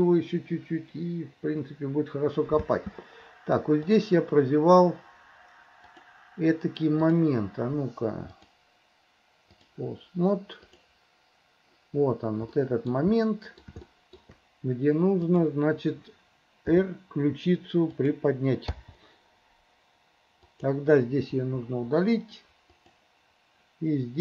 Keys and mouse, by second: 2.7 space, 3.8 click, 6.0-7.3 drag, 8.4-10.0 drag, 10.8 click, 12.6 middle click, 13.3 click, 13.9 shift+middle click, 16.8 r, 18.9 i, 20.5 click, 21.5 Delete, 22.8 click.